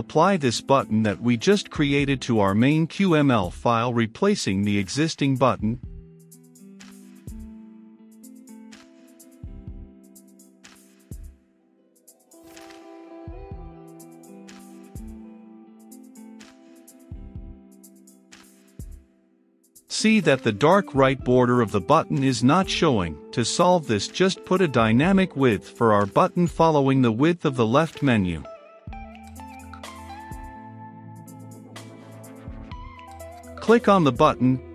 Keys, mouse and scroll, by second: 5.3 shift+l, 5.4 e, 5.6 f, 5.8 t, 6.4 Return, 7.6-8.6 drag, 8.7 shift+h, 8.9 o, 9.0 m, 9.1 e, 10.1-13.2 drag, 13.2 b, 13.4 t, 13.5 n, 14.6 shift+h, 14.9 o, 15.0 m, 15.1 e, 16.8-31.0 drag, 31.0 Return, 32.8-34.7 drag.